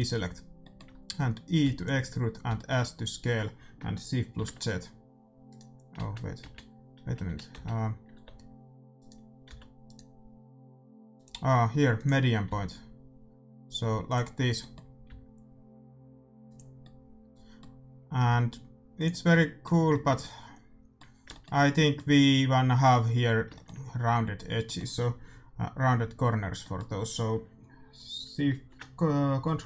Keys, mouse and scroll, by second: 0.0 click, 0.5-2.4 middle drag, 1.6 e, 2.4 s, 5.9 ctrl+z, 7.5 z, 8.1 e, 9.5 s, 11.1-13.0 drag, 12.4 s, 14.3-16.3 middle drag, 15.0 s, 16.7 middle click, 18.2 s.